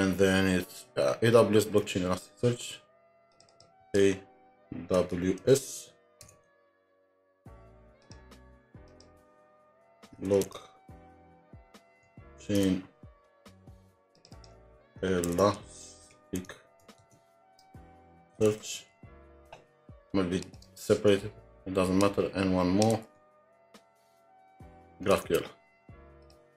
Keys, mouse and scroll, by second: 1.8 alt+Tab, 3.5 double click, 4.7-6.3 typing, 8.6-13.1 typing, 8.9 shift+click, 14.4 double click, 15.6-19.4 typing, 22.9-23.9 typing, 25.1 alt+Tab.